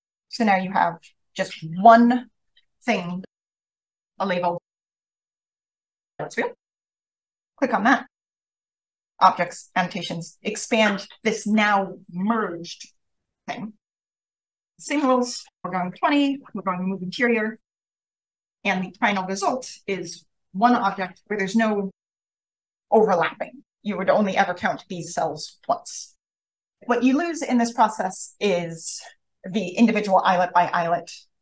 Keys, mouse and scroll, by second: 0.3 click, 0.4 click, 1.5 click, 15.0 click, 15.4-16.2 typing, 16.5 click, 18.1-21.1 scroll up 1, 18.9 click, 21.1-21.9 scroll up 1, 21.9-27.9 scroll up 1, 27.9-31.4 scroll up 1.